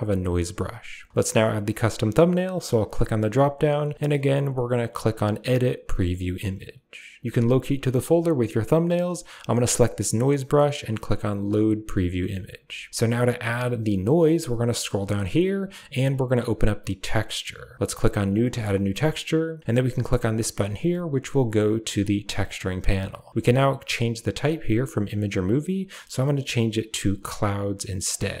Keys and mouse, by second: 2.7-7.2 drag, 9.5 click, 11.4 click, 17.0 click, 18.2 click, 25.1-28.1 drag.